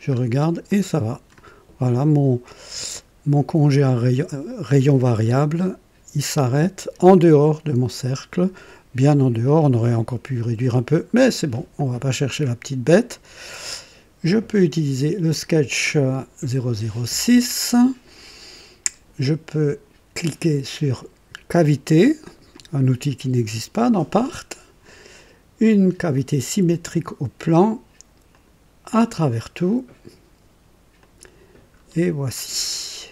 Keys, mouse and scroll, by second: 0.0-0.5 scroll up 2, 0.6 click, 8.0-8.4 scroll down 2, 8.5 scroll, 9.3-10.0 drag, 11.0 scroll down 2, 11.7 click, 12.8 click, 15.2 click, 21.5 click, 26.0 click, 28.2 click, 28.9 click, 30.9 click, 31.6-32.0 scroll up 2, 32.3-33.1 right drag.